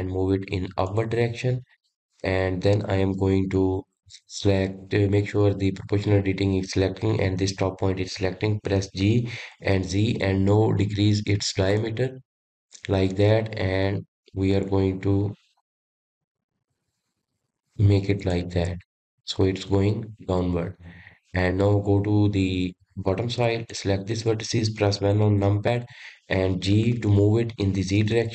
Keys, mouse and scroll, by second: 2.6-6.0 scroll up 2, 9.2 g, 19.1-24.0 middle drag, 24.0 click, 25.7 KP_1, 27.3 g.